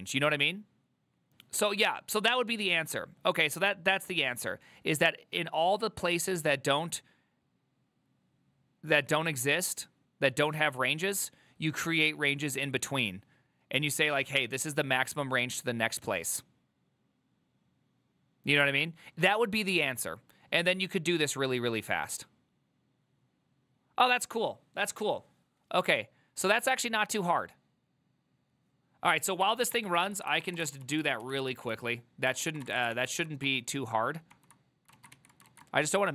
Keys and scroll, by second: 29.8-31.1 typing, 30.1 ctrl+c, 31.3 ctrl+u, 32.5 ctrl+c, 32.5-33.3 typing, 33.5 ctrl+d, 34.4 ctrl+d, 35.2 2, 35.6 ctrl+a.